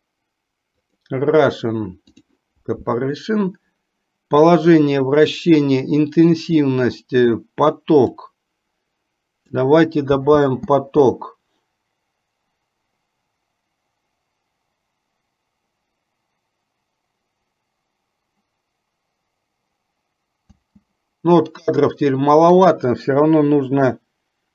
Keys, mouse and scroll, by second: 10.4 space, 20.7 space, 22.7-24.5 drag.